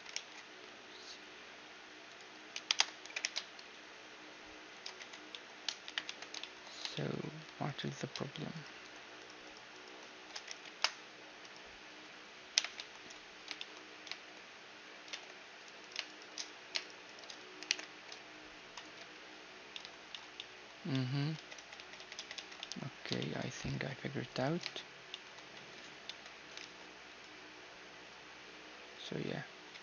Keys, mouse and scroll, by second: 2.3 ctrl+KP_Add, 2.6 g, 4.6 Tab, 4.9-5.9 middle drag, 5.5 KP_1, 5.7 Tab, 7.2-9.1 drag, 9.1-11.4 right drag, 9.8 s, 12.1 m, 12.4 a, 12.7-14.5 drag, 14.5 middle click, 14.7 ctrl+Tab, 15.4-18.4 right drag, 17.3 alt+m, 18.6 a, 18.8-25.2 middle drag, 21.0 ctrl+z, 21.2 ctrl+z, 21.4 ctrl+z, 21.6 ctrl+z, 21.8 ctrl+z, 22.0 ctrl+z, 23.3 ctrl+r, 25.2 Tab, 25.7 Tab, 26.2 ctrl+r, 29.5 Tab.